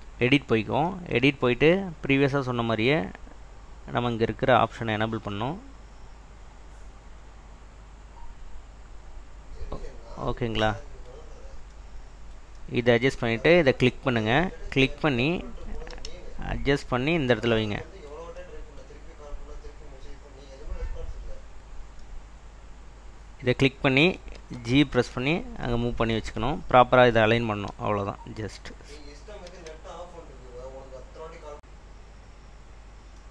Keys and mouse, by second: 8.1 click, 8.6 click, 9.1 click, 9.2 click, 16.0 g, 17.1 click, 24.5 g, 25.3 click, 27.8 r, 28.4 click, 29.6 g, 30.8 click, 32.1 click.